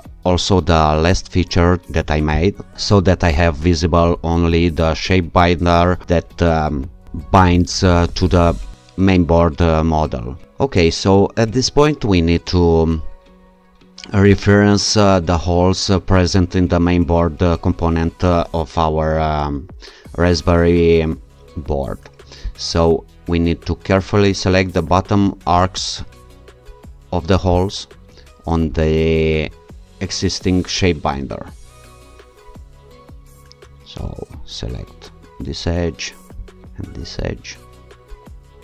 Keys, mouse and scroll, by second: 2.4 click, 13.3-14.2 scroll up 2, 14.2 scroll up 1, 16.4-17.7 scroll down 2, 22.5 click, 24.6-25.9 scroll up 2, 27.5 click, 28.8-29.6 scroll down 2, 34.1 alt+click, 36.4 ctrl+click, 37.2-38.2 scroll down 2, 38.2 scroll down 1.